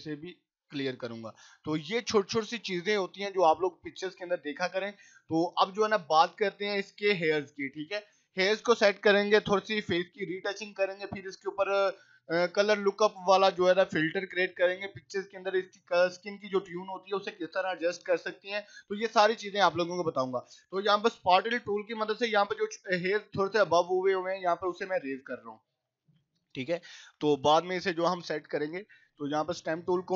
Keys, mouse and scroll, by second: 0.0 [, 0.2 click, 0.6 [, 1.0 click, 2.8 scroll up 1, 3.6 click, 5.1 scroll up 1, 5.7 click, 5.9 click, 19.4 click, 25.2-27.6 typing, 25.7 click, 26.4 click, 27.3 click, 29.1 click.